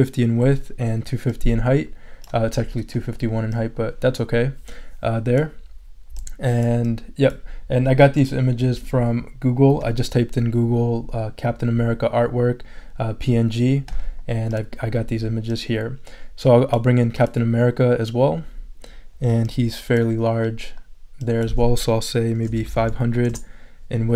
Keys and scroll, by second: 22.2-23.1 typing, 23.3 Return.